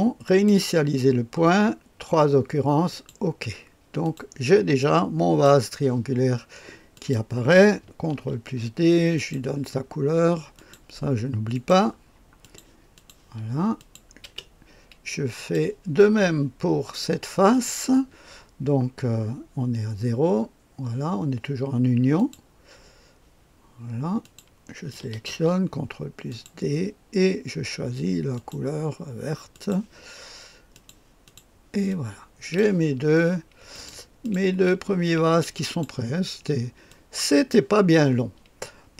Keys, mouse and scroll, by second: 0.3 click, 2.9 click, 4.0 click, 4.8 click, 6.9 click, 8.2 ctrl+d, 9.2 click, 10.6 click, 11.5 click, 12.4 click, 13.0 click, 13.8 click, 14.2 space, 15.4 click, 17.5 click, 22.2 click, 24.2 click, 25.3 ctrl+d, 26.3 click, 28.3 click, 29.5 click, 30.7 click, 31.3 click, 31.9 click, 33.7 click, 34.2 click, 34.5 space, 35.7-37.5 drag.